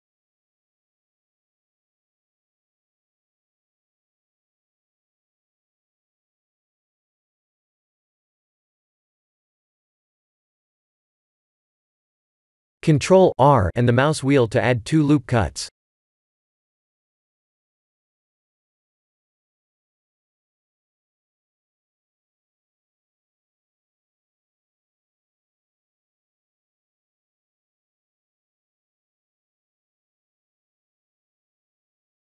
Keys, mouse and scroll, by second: 0.1 Tab, 0.7 middle click, 0.9 middle click, 1.0 middle click, 1.7 middle click, 1.8 Tab, 2.3 middle click, 2.6-3.3 scroll up 2, 3.3 Tab, 3.8 middle click, 4.0 middle click, 5.3-5.7 scroll down 1, 6.1 KP_7, 7.3 Tab, 7.7 ctrl+r, 12.1 ctrl+z, 12.8 ctrl+r, 14.5 shift+middle click, 15.6 click, 17.2 click, 18.4 click, 29.4 middle click, 29.9 middle click, 30.1 middle click, 30.6 3, 31.1 click.